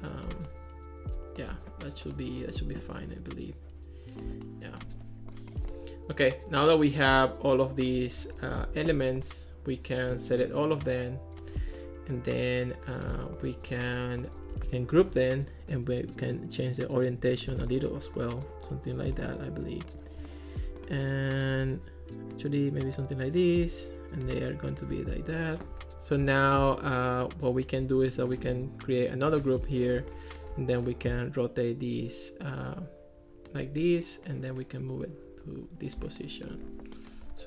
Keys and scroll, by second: 15.0 super+g, 29.3 super+g.